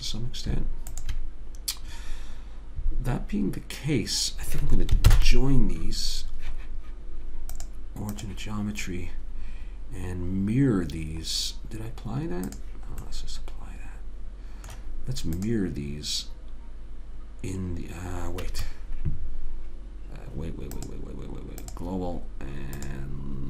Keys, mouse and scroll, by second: 0.1-2.8 drag, 5.4 ctrl+j, 7.9 click, 13.4-15.8 middle drag, 15.8 click, 21.1 click.